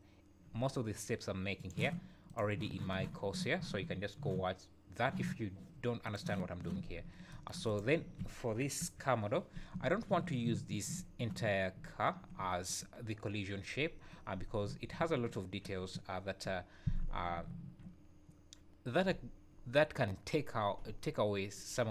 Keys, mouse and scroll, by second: 6.9 scroll up 3, 7.7 click, 8.0 `, 8.4 scroll down 3, 8.8 KP_1, 9.3-9.7 scroll up 2, 9.7 `, 10.9 `, 11.8 `, 15.0 `, 17.3 `, 18.1-18.4 scroll up 2.